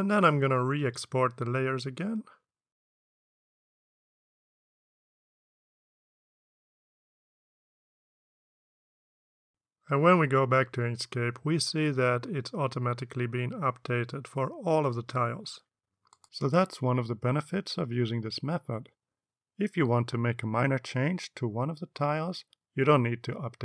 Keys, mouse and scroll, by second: 1.4 click, 2.5 click, 3.2 click, 4.0 ctrl+v, 4.7 click, 5.6 click, 6.5 click, 7.0 click, 7.9 click, 8.7 click, 9.9 click, 10.6 alt+Tab.